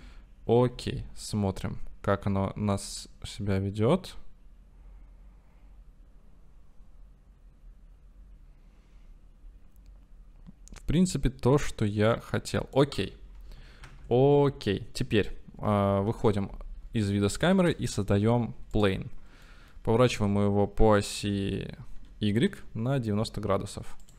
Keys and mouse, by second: 0.1 i, 2.1-11.8 drag, 12.3-13.0 middle drag, 14.4 ctrl+s, 16.1 KP_0, 17.1-19.1 drag, 17.5 shift+a, 19.6 click, 19.9 r, 20.2 x, 21.2 z, 22.0 y.